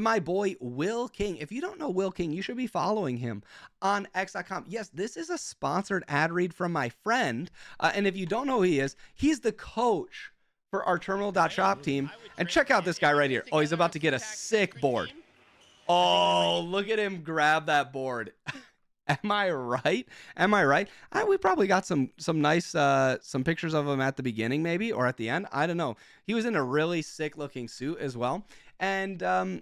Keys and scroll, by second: 8.3 ctrl+Tab, 8.9 f, 11.0 space, 16.3 space, 27.8 Escape.